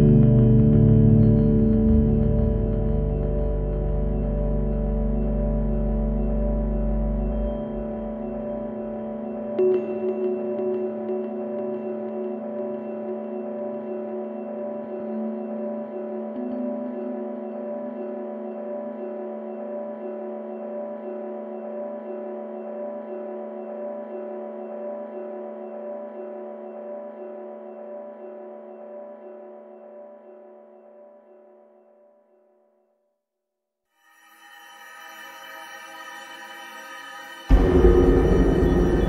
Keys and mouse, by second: 0.3 click, 0.5-11.4 drag, 12.9 click, 13.4 click, 14.2-20.1 drag, 22.0 shift+a, 27.5 click, 28.4 click, 29.1 click, 29.3-33.4 drag, 35.6 click, 36.6 click, 38.3 middle click.